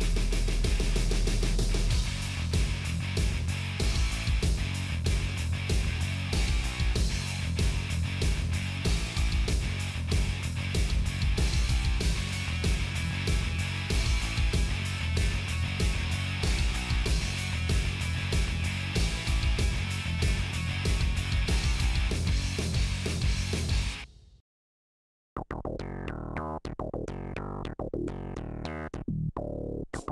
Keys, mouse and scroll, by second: 0.2 Delete, 1.1 click, 1.8 click, 2.4 f, 2.6 middle click, 3.5 click, 3.9 1, 4.3 click, 5.1 right click, 5.7 click, 6.7-9.7 middle drag, 9.7 scroll down 1, 10.0 middle click, 11.8 KP_7, 12.2 click, 13.0 g, 15.4 scroll down 2, 15.7 shift+middle click, 15.9 click, 17.4 g, 18.1 click, 18.3 shift+middle click, 18.7 g, 19.2 click, 19.7 g, 21.5 scroll up 2, 21.7-23.1 shift+middle drag, 23.1 scroll down 1, 23.2-24.4 middle drag, 24.4 click, 24.8 scroll up 1, 24.9 middle click, 25.4 f, 25.6 shift+click, 26.3 f, 26.5 shift+click, 26.9 f, 27.1 shift+click, 27.5 f, 27.6 middle click, 28.3 scroll up 1, 29.0 click, 29.8 Delete.